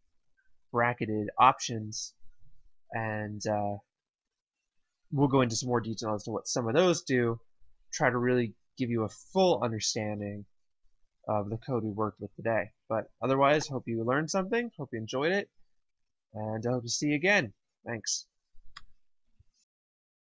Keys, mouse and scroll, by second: 13.3 click, 19.4 alt+Num_Lock, 19.6 alt+p.